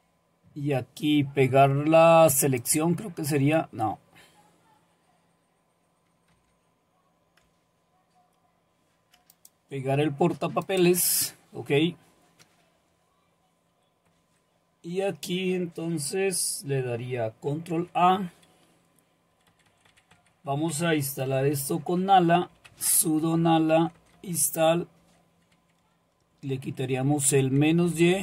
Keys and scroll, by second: 6.3 Delete, 7.3 BackSpace, 7.9 BackSpace, 14.2 Right, 17.8 ctrl+a, 19.3 Right, 19.5 Right, 19.7 Right, 19.9 Right, 21.2-23.2 typing, 23.4 Delete, 23.6 Delete, 23.8 Delete, 24.0 Delete, 25.5 Right, 25.8 Right, 26.0 Right, 26.2-27.7 Right, 27.7 Delete, 28.1 Delete.